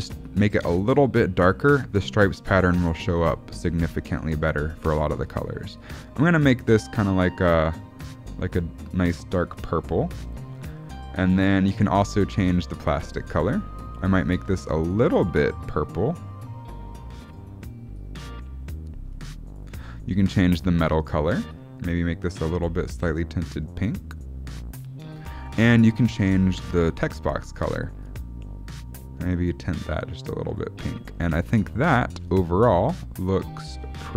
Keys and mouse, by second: 4.0-4.8 shift+middle drag, 5.2 click, 10.2-11.0 shift+middle drag, 12.3 click, 20.7 click, 26.0 click, 26.8 click, 32.1 s.